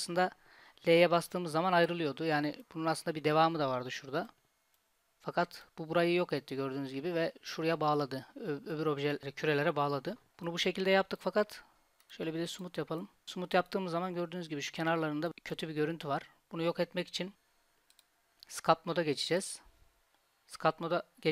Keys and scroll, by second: 1.2 l, 10.3 Tab.